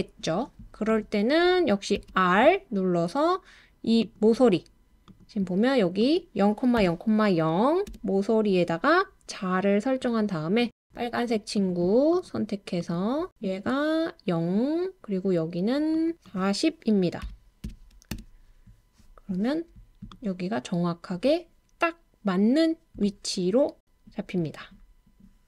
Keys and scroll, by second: 2.0 typing, 6.8 typing, 7.9 typing, 17.2-18.1 typing.